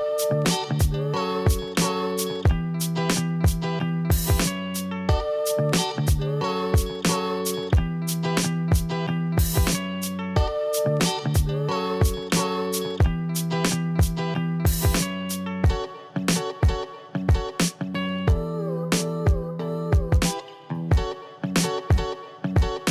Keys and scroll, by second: 0.2 ctrl+0.